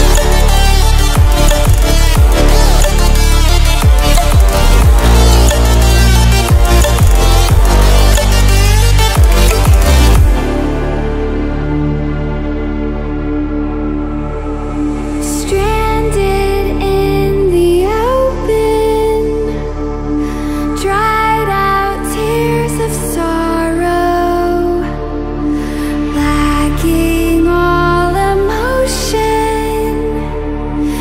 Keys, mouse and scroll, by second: 12.2-20.1 drag, 26.0 ctrl+alt+scroll up 1, 26.8-27.4 drag, 28.6-29.0 ctrl+alt+scroll down 1, 29.9-30.5 drag.